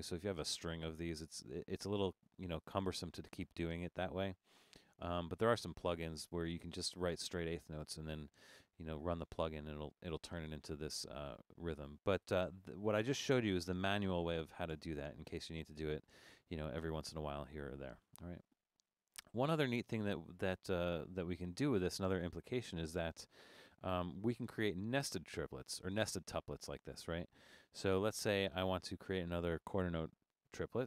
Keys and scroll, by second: 12.2 Escape, 14.7 BackSpace.